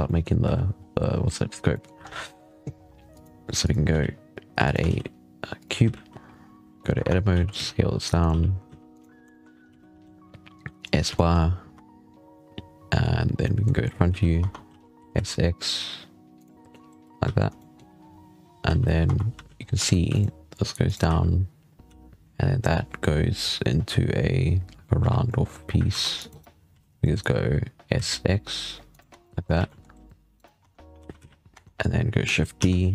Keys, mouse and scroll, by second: 0.0-0.3 typing, 0.6 scroll down 7, 1.6-1.9 shift+middle drag, 1.9 scroll up 5, 2.3 shift+a, 3.8 z, 4.4 x, 4.7 shift+a, 5.7 z, 6.3-6.6 scroll down 1, 6.8 Escape, 7.2 a, 7.4 s, 8.2 g, 9.0-10.0 scroll up 4, 10.8 s, 11.0-11.6 shift+middle drag, 11.6 Tab, 11.8-12.4 scroll down 2, 12.4 scroll up 3, 12.8-13.2 scroll down 3, 13.2 scroll up 2, 13.3-13.7 middle drag, 14.0 z, 14.3 Tab, 14.6 a, 14.9 s, 16.4 z, 16.5 middle drag, 17.1 z, 17.5-17.9 shift+middle drag, 17.9-18.5 scroll up 3, 18.5 z, 18.7 scroll down 4, 18.9 Tab, 19.2 z, 19.5 scroll up 3, 19.8 ctrl+r, 20.9 z, 21.7 z, 24.8 z, 25.0 scroll down 5, 25.1 middle click, 25.5 scroll up 1, 25.8 ctrl+r, 28.1 s, 28.9 Tab, 29.1-29.4 middle drag, 29.4 alt+a, 29.5 middle drag, 30.2 right click, 30.5 Tab, 30.8 a, 31.0 z, 31.4 Tab, 32.4 shift+d.